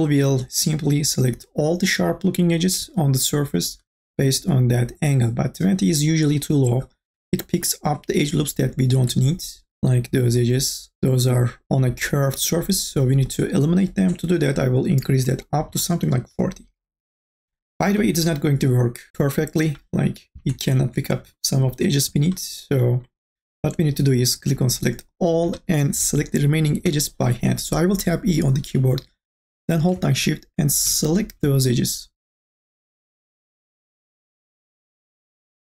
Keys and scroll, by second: 15.6 KP_4, 15.9 KP_0, 26.8 e.